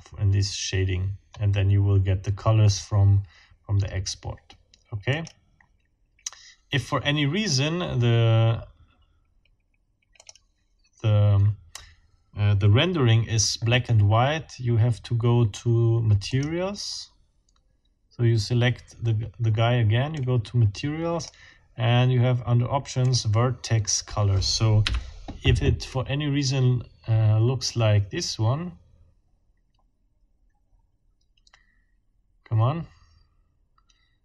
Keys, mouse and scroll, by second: 1.3-1.8 scroll up 4, 5.1 click, 10.2 scroll up 2, 16.3-16.6 scroll up 2, 20.1-21.4 scroll up 2, 23.1 click, 24.9 F12.